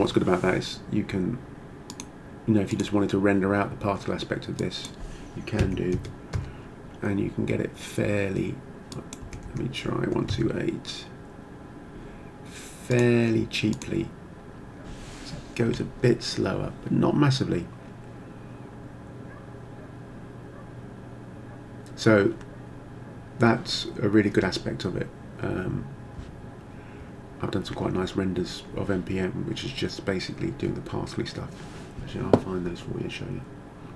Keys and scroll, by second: 5.6 6, 6.0 4, 6.4 Return, 9.2 1, 9.5 2, 10.0 8, 10.3 Return.